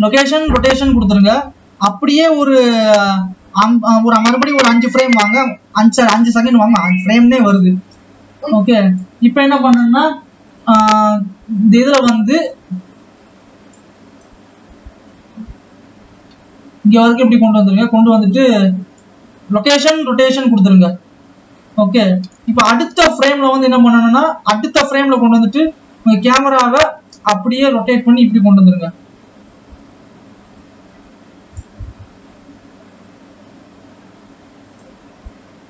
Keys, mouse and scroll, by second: 2.4 click, 8.2-18.4 drag, 24.1-25.1 drag, 27.2 click, 35.0 click.